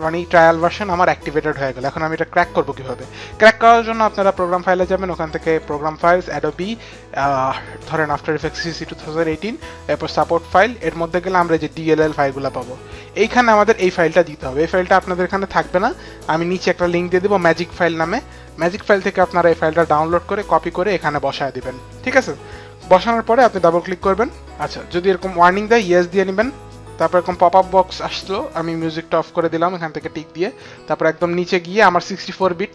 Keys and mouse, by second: 0.5 click, 3.9 click, 5.3 click, 6.2 click, 8.1 click, 10.7 click, 13.8 click, 16.5 click, 20.6 click, 23.4 click.